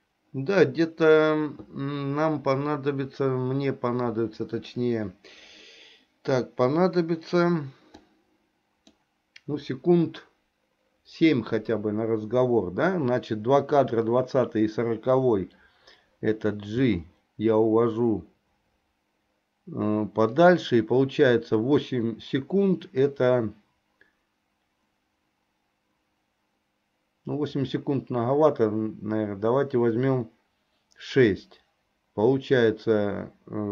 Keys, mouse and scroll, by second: 8.0 click, 8.2 click, 16.7 g.